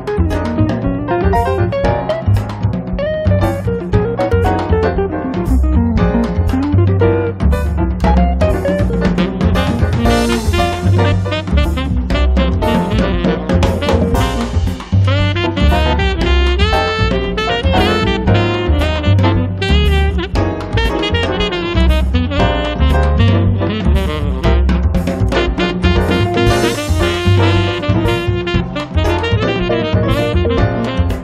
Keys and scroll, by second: 0.6-1.6 typing, 3.9 space, 6.5 r, 10.6 Escape, 11.4 p, 13.2 r, 30.1 e.